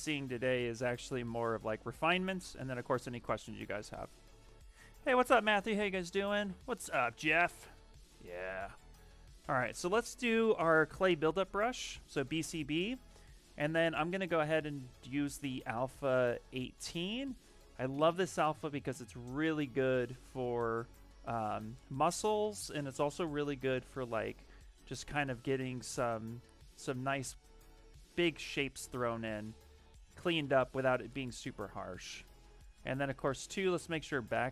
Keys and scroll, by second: 9.1-10.4 typing, 11.8 b, 18.6 ctrl+z, 20.7 s, 22.6 ctrl+z, 25.6 ctrl+z, 32.9 ctrl+z, 33.0 ctrl+z, 33.2 ctrl+z, 33.4 ctrl+z, 33.5 ctrl+z, 33.6 ctrl+z, 33.8 ctrl+z, 34.0 ctrl+z, 34.1 ctrl+z.